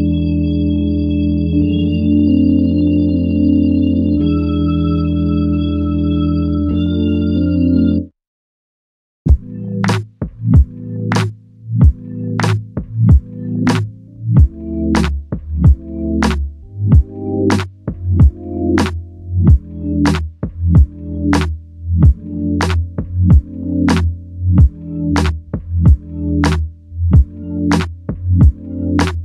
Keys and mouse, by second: 0.4 double click, 5.6 alt+click, 11.1 double click, 14.2 alt+click, 15.4 ctrl+alt+click, 22.7 r.